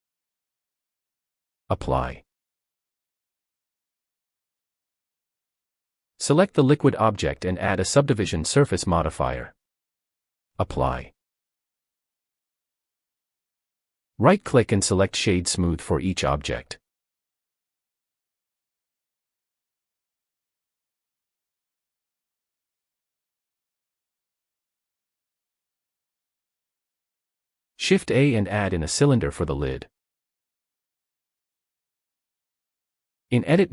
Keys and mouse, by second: 2.5-4.2 drag, 5.7 click, 6.3 click, 7.2-8.3 drag, 11.4 click, 13.5 click, 17.0 click, 19.0 click, 21.9-22.7 drag, 22.7-23.9 middle drag, 23.9 click, 24.1-25.9 middle drag, 26.8 shift+a, 32.6 Tab, 33.1 s.